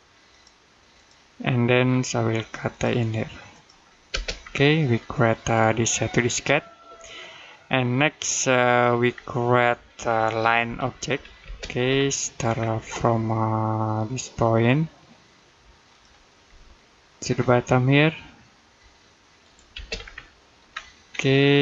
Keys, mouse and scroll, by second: 1.7-2.5 scroll up 1, 2.5 click, 3.9 space, 4.2 scroll down 1, 4.7 middle click, 8.9-9.4 scroll down 1, 9.4 middle click, 10.5 l, 11.3 space, 11.8-12.4 scroll up 1, 12.6 middle click, 15.7 click, 16.3 middle click, 19.2 click, 19.6 space, 19.8-20.2 scroll down 1, 20.2 middle click, 20.5-21.6 scroll up 1.